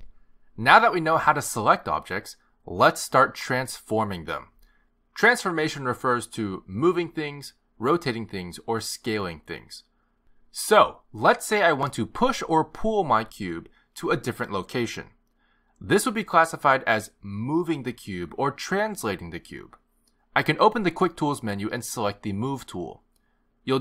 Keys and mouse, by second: 6.2 click, 23.4 click.